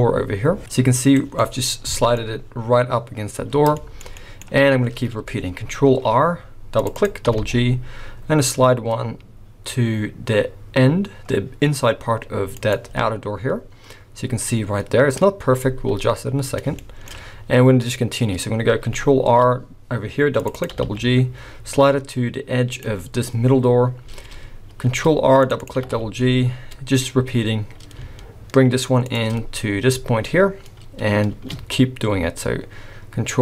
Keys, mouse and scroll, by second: 1.3 middle click, 1.6-3.2 scroll up 6, 2.0 shift+middle click, 3.5 scroll down 7, 3.7 shift+middle click, 4.1 middle click, 4.1-4.6 scroll up 1, 4.6-5.6 scroll down 1, 5.6 scroll down 1, 5.9 ctrl+r, 7.7 g, 12.8 scroll up 4, 13.6-14.9 scroll up 1, 16.2 scroll down 3, 16.8 shift+middle click, 17.3-18.0 scroll down 1, 18.0-18.8 scroll up 1, 19.2 ctrl+r, 20.7 g, 22.9-23.7 scroll up 3, 24.8 ctrl+r, 25.8 g, 29.4-30.6 scroll up 2, 30.6-31.1 scroll down 2, 31.1 scroll down 1, 31.3 ctrl+r.